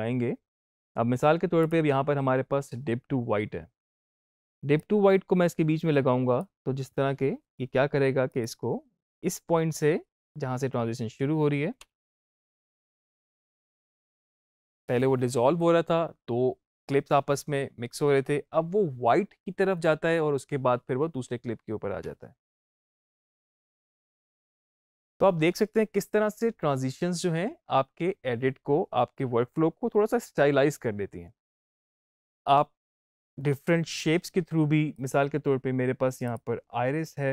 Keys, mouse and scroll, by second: 1.5 click, 4.6-8.2 drag, 11.6 space, 14.3 click, 21.9 space, 24.2 space, 24.3 click, 24.5 space, 34.8 click.